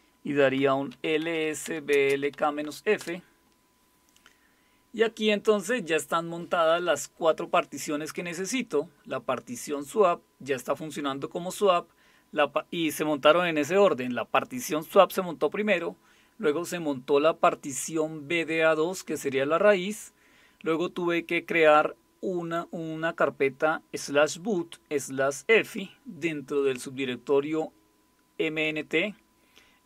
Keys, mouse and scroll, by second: 0.3-3.0 typing.